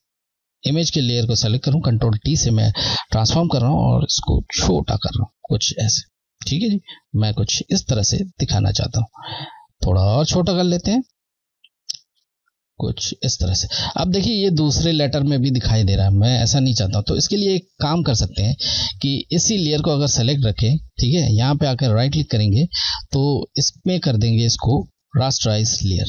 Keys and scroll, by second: 3.8 shift+Left, 5.7 Left, 9.7 shift+Left, 11.4 Left, 17.1 Left, 22.2 Right.